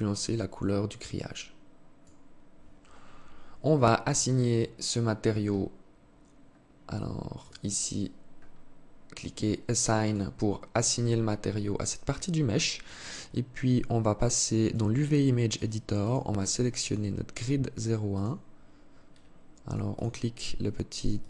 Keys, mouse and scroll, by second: 3.1-4.2 scroll up 16, 4.7-6.7 scroll up 13, 6.7 click, 7.7-8.3 scroll up 4, 9.2 click, 12.0 click.